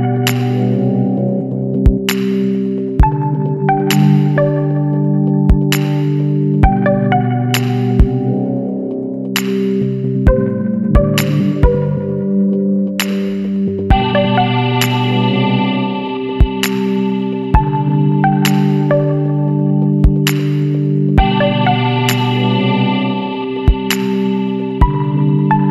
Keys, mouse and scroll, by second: 1.7 click, 3.0 scroll down 1, 4.1 click, 5.0 click, 6.2 KP_1, 6.4 KP_5, 6.8 KP_Enter, 8.9 click, 10.0 KP_4, 10.2 KP_0, 10.6 KP_Enter, 11.5-11.8 scroll down 2, 12.8-15.5 drag, 17.3 Right, 18.1 Left, 18.4 Down, 19.8 scroll up 2, 23.2 click, 24.8 click.